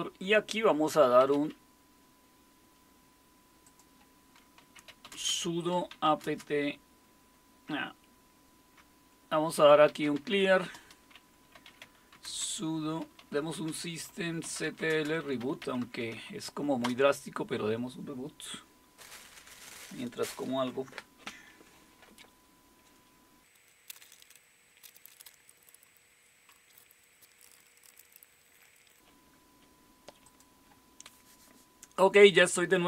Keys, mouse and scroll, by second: 0.8-1.8 typing, 3.6 click, 4.4-6.6 typing, 7.7-17.3 typing, 27.1-28.6 typing, 30.2-32.8 drag.